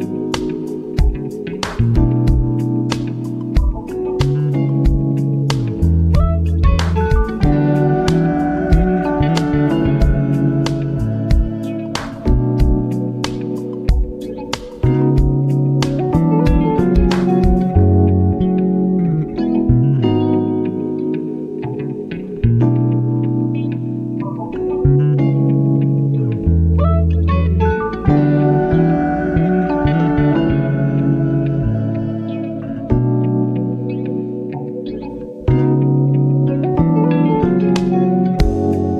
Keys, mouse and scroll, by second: 0.6 scroll down 2, 1.1 ctrl+alt+scroll up 1, 1.4 click, 1.6 scroll down 2, 2.4-6.0 drag, 6.0 v, 7.2-10.9 drag, 10.9 ctrl+t, 11.9-13.1 drag, 13.1 Return, 13.4 v, 13.7 Down, 15.4 ctrl+t, 16.2-17.5 drag, 17.5 Return, 17.8 v, 18.8 click, 19.9 ctrl+z, 21.3-25.7 drag, 25.7 Left, 25.9 Up, 26.3 Left, 26.5 Up, 27.2 Left, 27.5 Up, 28.7 t, 30.0 click, 30.8 click, 32.6 Insert, 32.6-35.3 typing, 36.4 BackSpace, 38.3-38.9 typing.